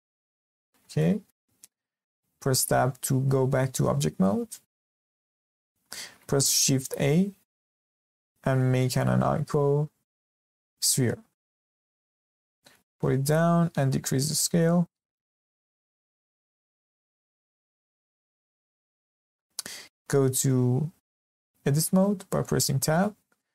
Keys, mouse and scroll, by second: 0.0-0.6 shift+middle drag, 0.6-1.0 scroll up 2, 1.0-3.8 shift+middle drag, 3.8 Tab, 5.0-5.4 shift+middle drag, 5.4 click, 5.7 scroll down 3, 5.9 shift+middle click, 6.8 shift+a, 12.2 g, 13.8 s, 15.4-15.9 scroll up 2, 15.9-16.3 shift+middle drag, 16.3 scroll up 1, 16.5-17.2 shift+middle drag, 17.2 g, 18.9 scroll up 1, 19.0-21.5 shift+middle drag, 21.5 Tab, 22.1-22.4 scroll up 1, 22.4-23.5 shift+middle drag.